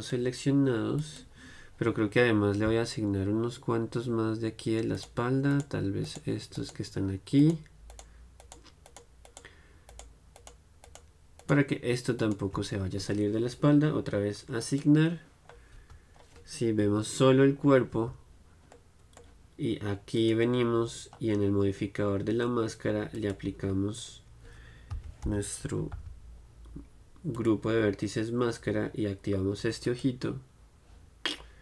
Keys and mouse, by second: 1.2-3.0 drag, 3.0-5.2 middle drag, 5.2-14.9 right drag, 14.9 click, 15.7-16.7 drag, 16.7-20.3 middle drag, 17.0 KP_Divide, 18.3 Tab, 20.3-31.6 drag, 31.4-31.6 middle drag.